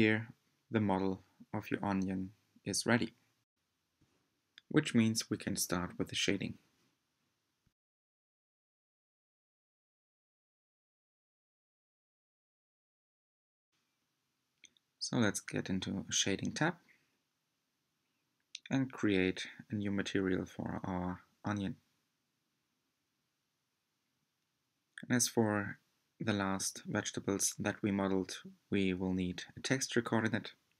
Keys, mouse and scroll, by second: 0.3 g, 2.8-4.2 middle drag, 4.2-4.7 scroll down 1, 4.9-6.9 middle drag, 6.9 alt+click, 7.8-10.7 middle drag, 10.7 click, 11.4 scroll down 1, 11.6-13.4 middle drag, 13.4 click, 14.5-14.9 scroll up 7, 15.7-18.9 shift+middle drag, 18.9-21.2 drag, 29.5-30.7 drag.